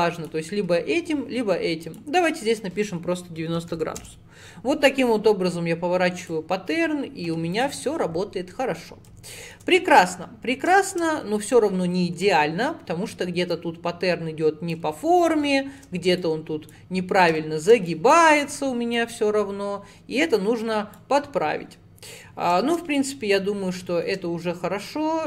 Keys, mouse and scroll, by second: 1.9-5.0 drag, 6.2-7.7 drag, 8.3 scroll down 1, 8.8-11.6 middle drag, 11.6 click, 13.5 click, 15.5 shift+middle click, 16.2 click, 17.4 shift+middle click, 17.9-19.0 drag, 22.4-22.7 scroll down 2, 22.7 shift+middle click, 23.0 click, 23.7-24.0 scroll up 4, 24.0 shift+middle click, 24.9 click.